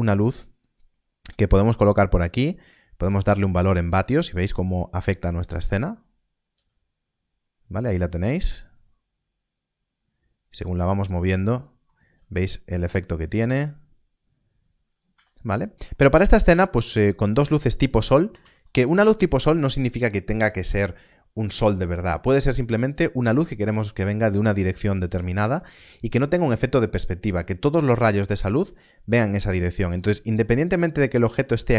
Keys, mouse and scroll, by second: 0.5 click, 6.5 click, 11.0 g, 11.3 click, 11.4 middle click, 12.0 g, 14.8 g, 15.1 x, 15.2 click, 16.6 shift+middle click, 18.3 alt+a, 29.4 alt+a, 30.5 scroll down 1, 31.3 scroll down 1.